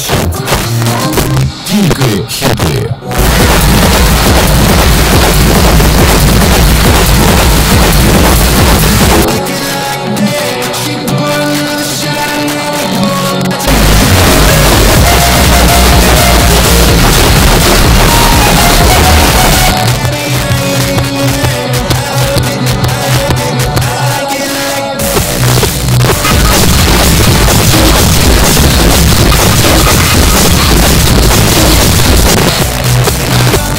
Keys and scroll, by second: 9.3 Page_Down, 19.7 Page_Down, 32.3 Page_Down.